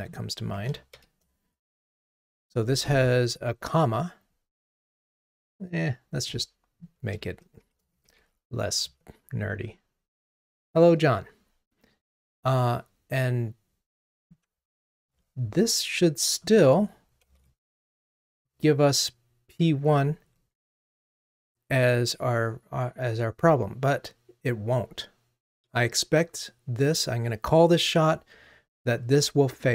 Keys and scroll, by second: 14.8 super+BackSpace, 17.3 super+BackSpace, 17.4 alt+Up.